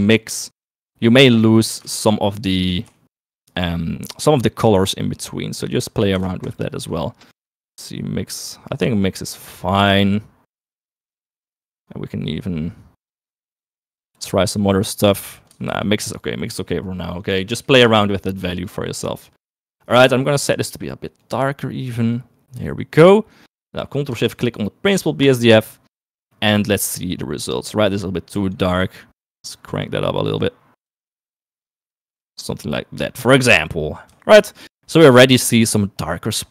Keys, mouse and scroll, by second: 0.7 click, 2.1 ctrl+shift+click, 2.9 shift+middle click, 5.5 middle click, 6.5 ctrl+shift+click, 7.4 click, 11.4 click, 13.1-14.5 drag, 15.7 ctrl+z, 16.5 middle click, 17.5 middle click, 18.1 click, 19.0 click, 20.2 click, 23.7 middle click, 25.3 ctrl+shift+click, 26.4 middle click, 27.6 click, 34.8 shift+middle click.